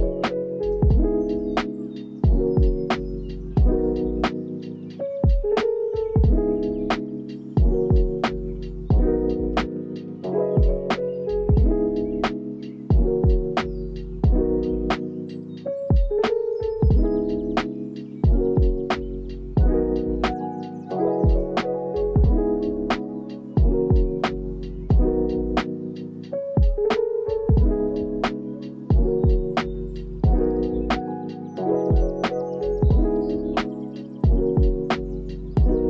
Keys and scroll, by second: 4.4 ctrl+v, 6.1 ctrl+v, 7.0 ctrl+s, 8.2 space, 11.1 space, 23.7 n, 24.1 ctrl+s, 26.9 ctrl+k, 30.2 4, 30.5 Return, 31.7 ctrl+s, 32.2 space.